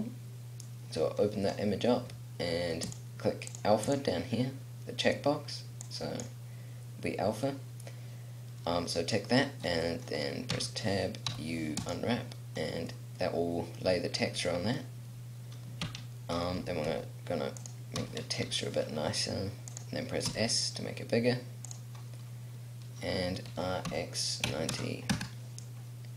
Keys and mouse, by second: 10.4 middle click, 10.7 Tab, 11.4 u, 12.4 click, 16.0 Tab, 16.7 s, 18.1 s, 20.4 s, 22.3 middle click, 23.6 r.